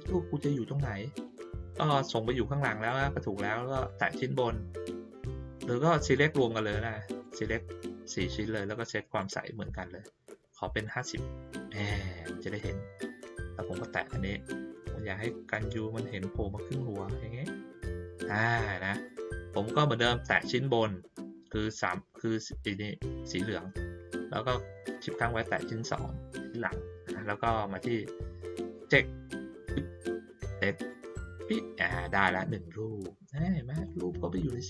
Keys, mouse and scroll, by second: 3.8 click, 6.1-7.2 drag, 9.1 right click, 10.8 click, 11.7 click, 12.5 click, 14.4-18.2 drag, 18.9 click, 20.2 click, 25.1 shift+click, 27.7 click, 30.7 click, 33.3 click, 33.8 middle click.